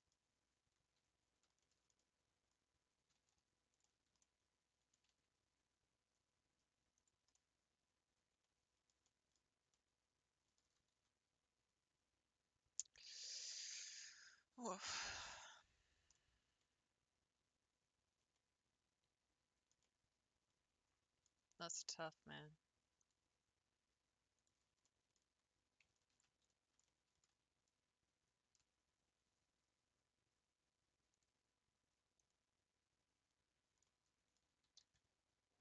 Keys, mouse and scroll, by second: 0.3 scroll up 2, 0.6 Tab, 1.2 scroll up 3, 1.6 shift+middle click, 2.1-2.7 scroll down 3, 2.7 scroll up 1, 3.7 alt+click, 4.2 middle click, 5.0 g, 7.3-9.4 middle drag, 9.4-9.8 scroll up 3, 9.8 middle click, 10.7 g, 13.9-21.9 middle drag, 21.9 click, 23.0 click, 24.4 click, 24.9 shift+middle click, 25.4-25.9 scroll up 2, 26.4 ctrl+s, 26.9 shift+middle click, 27.8 shift+click, 31.6 click, 32.2 click, 33.4 scroll down 4, 33.9 middle click, 34.6 s, 35.4 s.